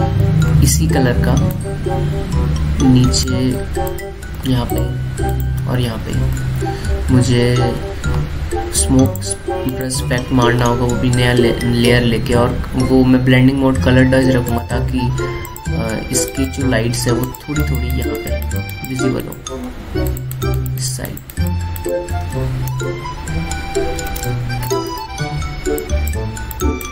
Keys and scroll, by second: 1.0 ctrl+z, 4.2 ctrl+z, 5.1 ctrl+z, 6.5 ctrl+z, 7.1 ctrl+z, 23.2 space, 24.8 alt+space.